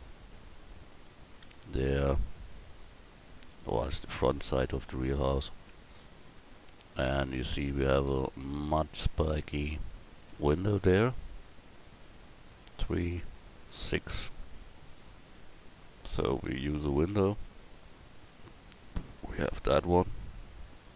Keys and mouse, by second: 3.9 KP_1, 18.9-20.9 drag.